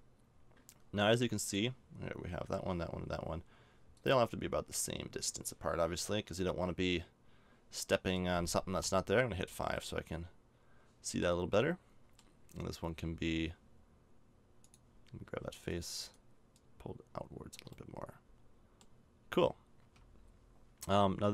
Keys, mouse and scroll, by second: 4.0-6.1 drag, 6.4-7.6 middle drag, 8.8 KP_5, 14.6-17.7 drag, 15.7-17.7 right drag, 18.3-19.8 middle drag, 19.8 a.